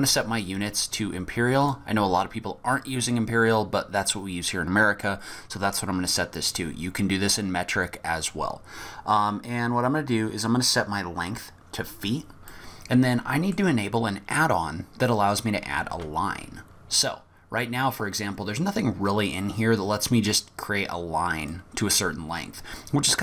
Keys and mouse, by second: 0.9-1.7 drag, 12.5 click, 12.6-13.4 middle drag, 13.5 click, 15.9 shift+a.